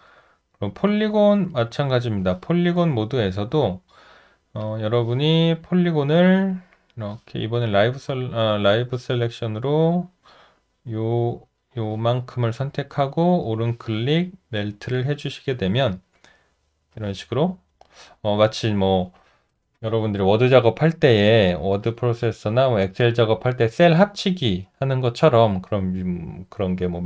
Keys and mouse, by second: 0.1 alt+right click, 1.1 alt+middle click, 1.6 alt+right click, 3.4 shift+z, 12.3 alt+right click.